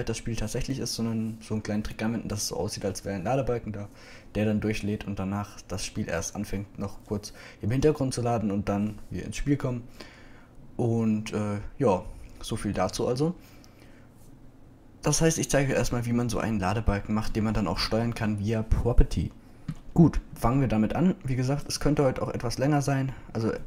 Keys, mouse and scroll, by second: 23.1-23.6 drag.